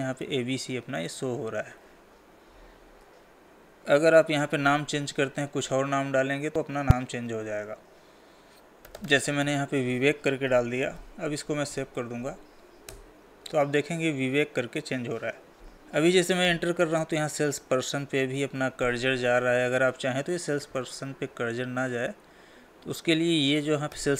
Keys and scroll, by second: 12.5 ctrl+a, 21.6 Tab.